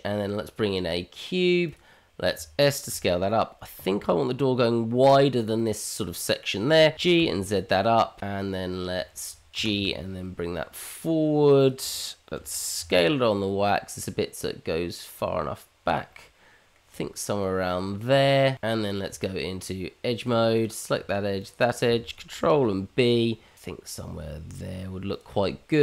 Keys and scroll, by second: 2.9 s, 6.9 g, 9.5 g, 12.3 s, 19.6 Tab, 22.5 ctrl+b.